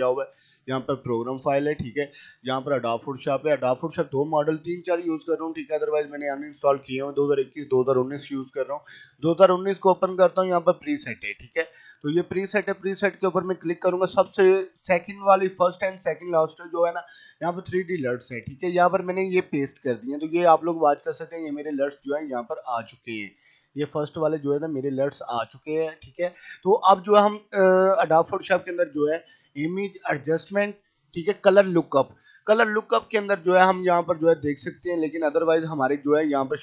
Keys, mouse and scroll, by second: 8.1 click, 17.9-22.0 drag, 22.0 right click, 22.3-26.5 drag, 28.0 click, 33.8 scroll down 1.